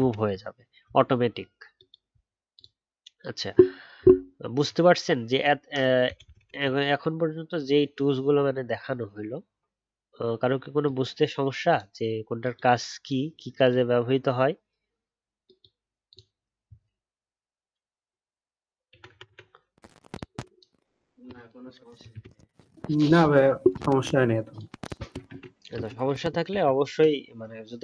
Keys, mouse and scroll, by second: 22.1 ctrl+z, 25.2 ctrl+z, 25.7 ctrl+z.